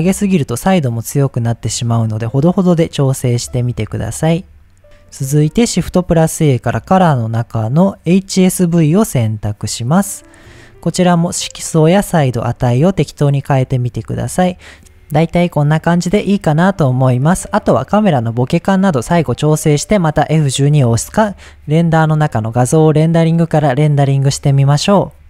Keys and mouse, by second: 0.5 click, 1.2 click, 2.5 click, 3.8-4.8 drag, 5.5 shift+a, 12.9-14.8 shift+drag, 14.8 ctrl+a, 14.8 ctrl+s, 22.2-23.9 drag, 24.1 click.